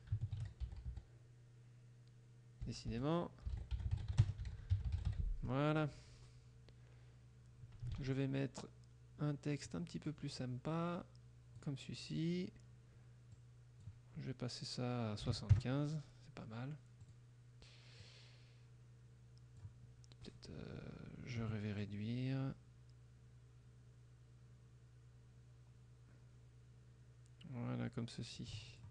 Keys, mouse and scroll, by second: 0.0-1.5 typing, 2.7-5.6 typing, 8.0 ctrl+a, 9.7 click, 10.5 click, 13.4 click, 15.3 KP_7, 15.6 KP_Enter, 17.1 click, 18.1-19.9 drag, 21.9-28.6 ctrl+drag, 28.8 ctrl+click.